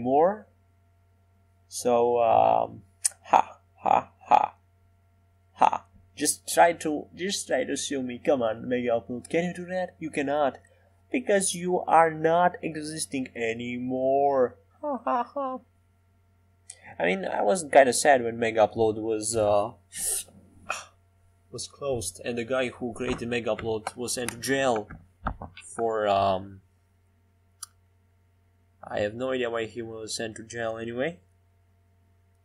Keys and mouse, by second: 1.1-3.8 middle drag, 3.8 Tab, 7.1 middle click, 9.3 ctrl+j, 10.3 g.